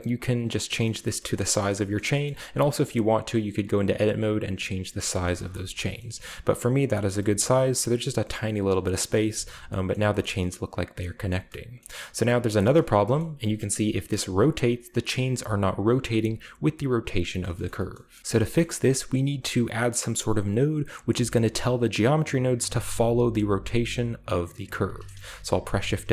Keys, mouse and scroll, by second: 0.6 middle click, 0.8 middle click, 0.9-1.9 scroll down 2, 1.2 shift+middle click, 1.9-2.8 shift+scroll up 2, 2.0 middle click, 2.4 Tab, 2.8-4.7 right drag, 4.7-5.9 scroll down 2, 5.1-5.6 shift+middle drag, 5.5 a, 5.9-6.6 shift+scroll up 1, 6.7-7.5 middle drag, 7.2 typing, 8.7-9.1 scroll down 2, 9.1-9.6 middle drag, 9.1 a, 9.9 shift+middle click, 10.2 shift+middle drag, 10.9 shift+middle drag, 11.2-11.9 shift+scroll up 1, 11.9-12.3 shift+scroll down 1, 12.3 shift+right click, 12.9-13.8 shift+middle drag, 13.1-14.0 shift+scroll up 1, 17.3 shift+middle drag, 17.6 shift+middle click, 17.9 shift+middle click, 18.2-21.2 shift+middle drag, 18.2-19.4 scroll down 3, 21.2-22.2 scroll down 2, 21.5 middle click, 25.1-25.5 shift+middle drag, 25.4 shift+a.